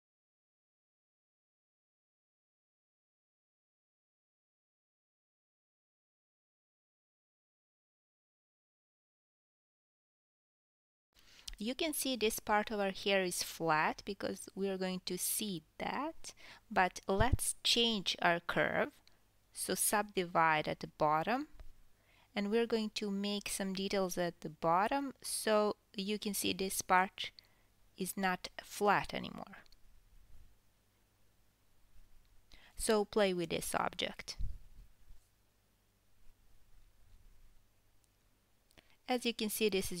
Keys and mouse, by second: 0.0 Tab, 3.2 Tab, 4.0 KP_3, 4.8 g, 5.5-7.9 ctrl+middle drag, 6.7 g, 9.4 KP_1, 11.0 Tab, 11.1 alt+s, 12.2-16.0 ctrl+middle drag, 14.4 KP_1, 14.7 KP_7, 15.6 KP_1, 16.6-17.0 drag, 17.0 KP_7, 18.5 Tab, 18.9 drag, 19.3 shift+drag, 21.1 click, 21.1-28.5 middle drag, 21.4 g, 22.2 r, 23.1 click, 23.4 shift+click, 24.2 KP_1, 27.5 KP_7, 28.6 click, 28.6-33.2 middle drag, 28.9 shift+click, 30.4 click, 31.1 g, 31.7 r, 34.7 r, 36.5 ctrl+s, 36.8 KP_1, 37.6 Tab, 37.8-40.0 shift+middle drag.